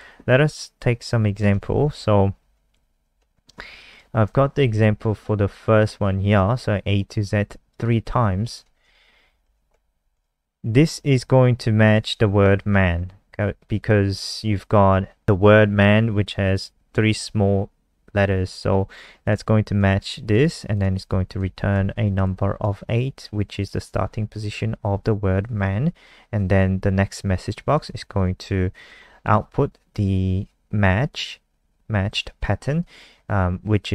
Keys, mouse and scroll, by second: 1.3 click, 1.9 Home, 2.8 shift+End, 3.1 shift+Down, 6.3 click, 9.2 shift+Up, 9.4 shift+Tab, 9.6 Left, 10.1 click, 12.0 click, 19.2 click, 21.0 ctrl+s, 21.4 F5, 22.2 alt+click, 27.7 click, 28.8 alt+click.